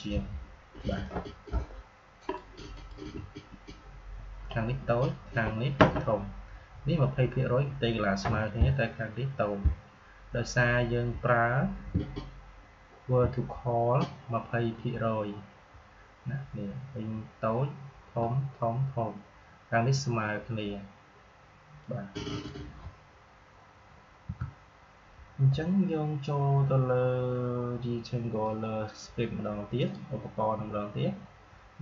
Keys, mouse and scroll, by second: 0.9-4.9 drag, 21.7-24.2 drag, 24.2 Delete, 29.7 click.